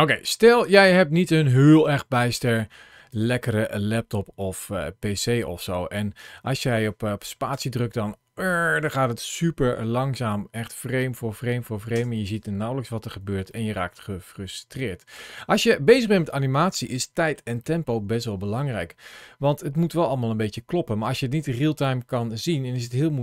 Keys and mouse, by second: 1.1 click, 2.3 click, 4.4-5.5 drag, 6.5 click, 7.3 space, 11.8 space, 13.4 shift+middle click, 13.9-15.3 middle drag, 15.6 shift+middle click, 16.1 shift+middle click, 16.7 middle click, 17.4 shift+middle click, 18.4-21.7 drag.